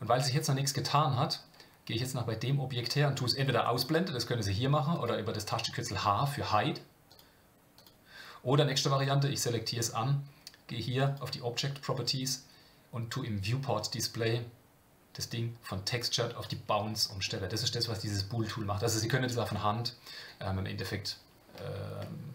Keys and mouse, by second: 0.8 click, 3.8 click, 4.9 click, 7.1 click, 7.7 click, 11.0 click, 15.3 click, 17.0 click, 17.3-19.1 middle drag, 21.0 click, 21.5-22.0 middle drag.